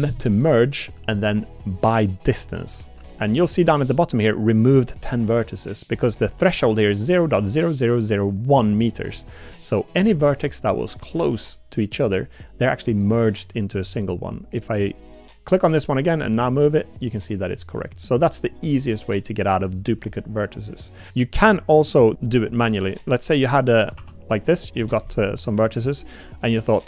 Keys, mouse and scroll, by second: 10.7 middle click, 11.0 click, 15.4 click, 16.0 g, 21.0 click, 23.9 ctrl+r, 25.1 click, 26.4 click.